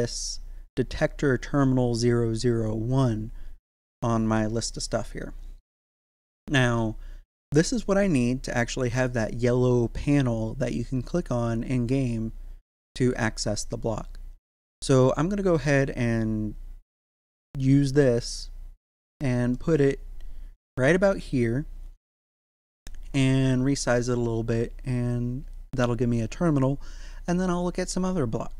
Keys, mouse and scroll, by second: 19.5 middle click, 20.0-21.9 scroll up 1.